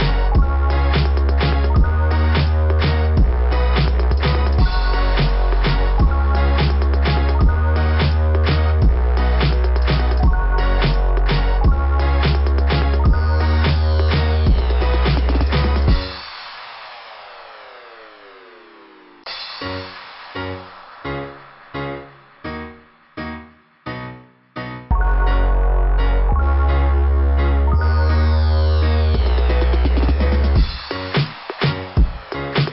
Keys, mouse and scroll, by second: 1.0 scroll up 2, 3.2 click, 3.9 click, 6.6 right click, 8.9 click, 9.6 right click, 9.9 right click, 10.9 click, 15.2-15.6 scroll up 4, 16.0-16.8 scroll up 3, 17.4 scroll up 1, 18.1 click, 20.3 click, 22.2 scroll down 2, 24.7 click, 26.3 click, 27.8 click, 29.0 scroll up 2, 31.0 click, 31.7 click.